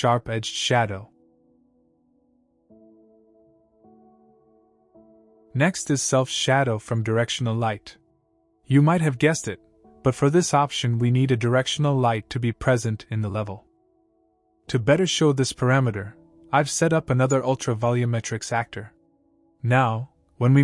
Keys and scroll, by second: 14.5 ctrl+l.